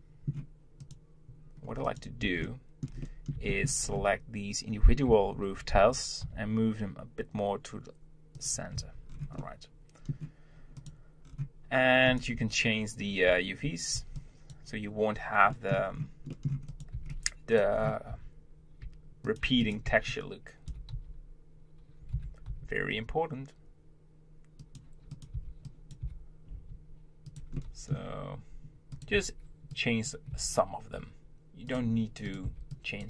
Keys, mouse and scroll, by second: 0.8 click, 2.2 click, 2.4-3.8 shift+middle drag, 3.8 scroll up 3, 4.0 Tab, 5.0 g, 8.8 Tab, 9.1-9.4 scroll down 4, 9.4-10.7 middle drag, 10.7 click, 11.2-12.1 scroll down 4, 12.1 click, 12.4 Tab, 13.2 z, 15.2 scroll up 2, 15.5-15.9 middle drag, 16.3 middle click, 16.7 click, 16.9 b, 17.7 scroll up 2, 18.1 g, 19.6 click, 19.8 b, 25.1 click, 25.3 b, 27.6-28.9 middle drag, 28.9 click, 29.1 b, 32.2 click, 32.4 b.